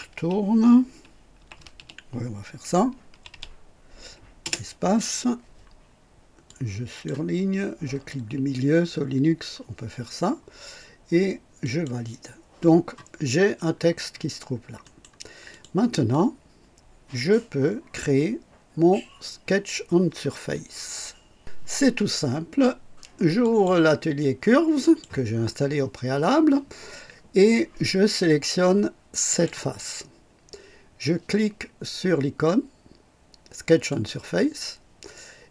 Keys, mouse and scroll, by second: 0.0-3.2 typing, 4.3 typing, 6.4 click, 7.9 middle click, 8.9 middle click, 11.6 click, 13.1-13.9 scroll down 2, 14.0 scroll up 1, 14.8 right click, 15.4 click, 16.0-17.3 drag, 21.3 click, 23.4 click, 24.8 click, 29.3 click, 33.8 click.